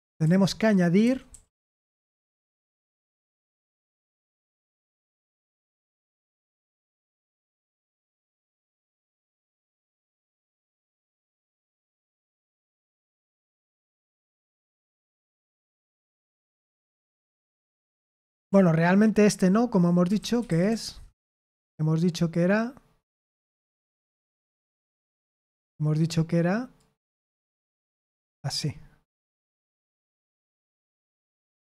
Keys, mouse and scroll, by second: 0.0-1.5 typing, 4.7 typing, 16.7-20.8 typing, 23.2-24.4 typing, 26.7-28.9 drag, 30.5 ctrl+p, 31.0 ctrl+p.